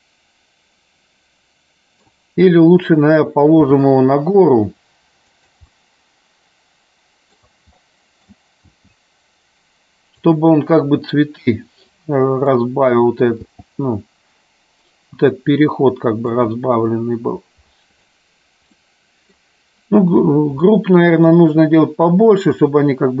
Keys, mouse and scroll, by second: 5.9-7.6 middle drag, 7.9 scroll up 1, 8.1 middle click, 8.3 scroll down 1, 10.3 click, 10.7-12.2 middle drag, 12.8 middle click, 13.6 g, 16.6 click, 16.9-18.4 middle drag, 19.1 middle click, 21.0-21.4 shift+middle drag.